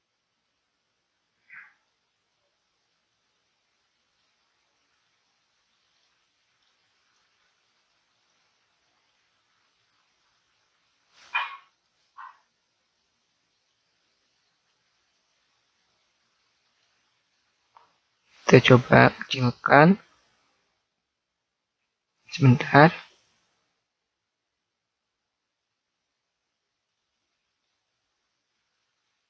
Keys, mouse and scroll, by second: 1.8-3.2 middle drag, 4.3 z, 11.0 z, 11.8-13.5 middle drag, 16.7 b, 19.5 s, 20.4-23.4 right drag, 26.0-27.5 middle drag, 27.8 z, 29.1 click.